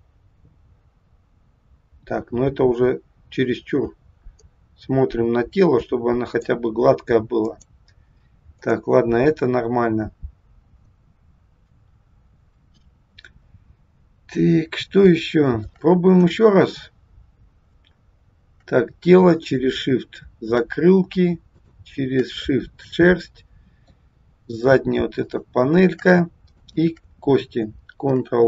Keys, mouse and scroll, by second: 7.5 click, 10.1 scroll down 2, 14.0 scroll up 3, 15.1 shift+middle click, 16.0-17.0 scroll down 2, 19.2 shift+click, 21.5 shift+click, 22.6 middle click, 25.2 shift+click, 26.6 shift+click, 28.0 ctrl+p.